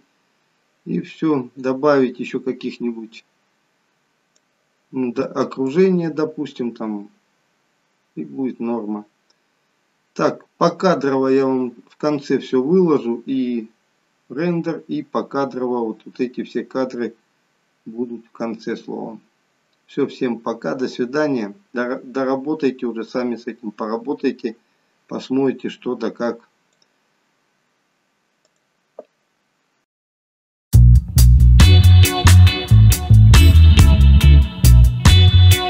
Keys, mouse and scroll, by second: 5.8 click.